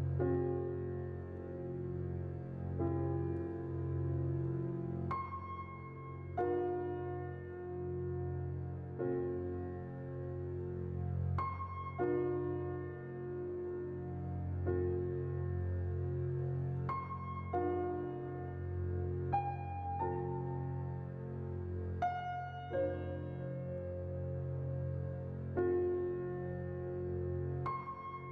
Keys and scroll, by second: 1.5 z, 6.0 a, 9.0 a, 11.3 z, 16.0-16.9 typing.